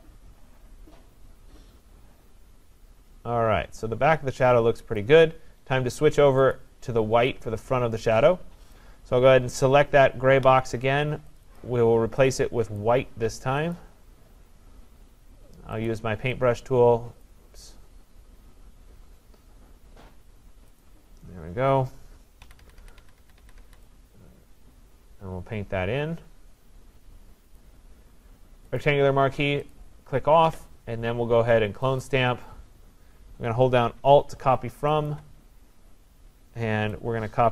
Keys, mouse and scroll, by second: 5.0 click, 6.6 click, 8.7 click, 11.4 click, 11.6 click, 12.8 click, 13.8 click, 15.9 click, 17.3 click, 20.9 click, 22.5-23.6 typing, 27.6 click, 28.9 click, 29.7 click, 32.0 click, 35.1 alt+click.